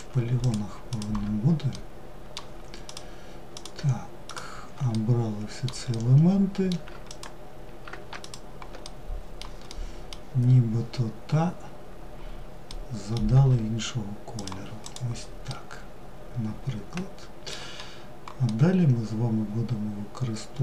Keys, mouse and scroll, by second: 0.1 shift+click, 0.9-2.0 middle drag, 2.0 shift+click, 2.7 shift+click, 3.4 shift+click, 4.1-6.3 middle drag, 6.3 ctrl+click, 7.4 shift+click, 8.0-12.5 middle drag, 12.5 g, 14.0 click, 14.7-20.6 middle drag.